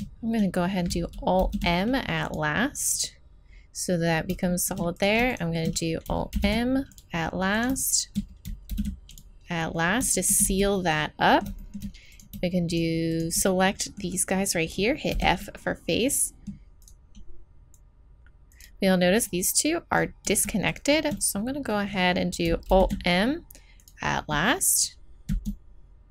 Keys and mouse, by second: 1.4 alt+m, 4.4 middle click, 5.0-6.3 right drag, 6.3 alt+m, 6.3 middle click, 7.6-10.0 drag, 8.7 alt+m, 10.1 click, 10.4 z, 14.9 click, 15.1 f, 16.4 middle click, 16.8 right click, 18.9 right click, 18.9-22.1 middle drag, 22.7 alt+m, 25.3 z.